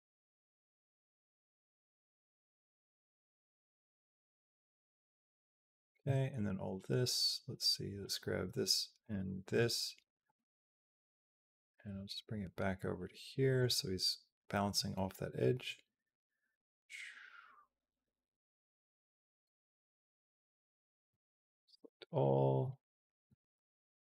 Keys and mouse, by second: 1.7-5.4 drag, 7.8 click, 8.8 shift+click, 10.1 g, 15.5-19.2 drag, 21.1 a, 21.5 b, 23.1 g.